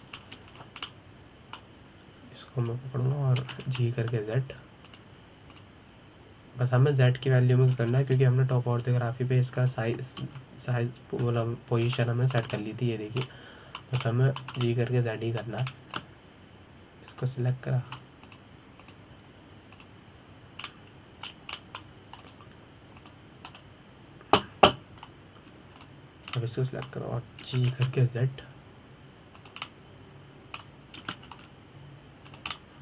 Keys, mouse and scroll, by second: 1.9-2.3 scroll down 2, 2.5-4.3 middle drag, 4.3 click, 5.0 g, 6.6 click, 7.2 click, 8.4 click, 9.4 g, 11.9 KP_7, 13.6 shift+middle click, 14.2-14.9 scroll up 2, 14.9 scroll up 5, 14.9-18.8 middle drag, 18.8 click, 19.9 click, 20.5 click, 21.4 click, 22.3-23.9 middle drag, 23.9 click, 24.7 click, 25.1 click, 27.4 shift+click, 28.0-29.1 middle drag, 29.1 g, 31.3-32.7 middle drag, 32.7 g.